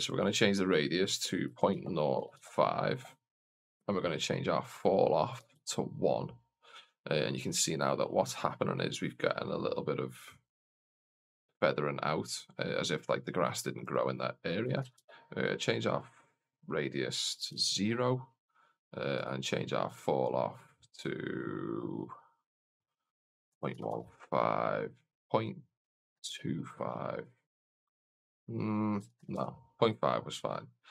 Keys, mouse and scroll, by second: 4.0-6.5 drag, 13.7-15.8 drag, 16.4-18.3 drag, 19.0-30.9 drag.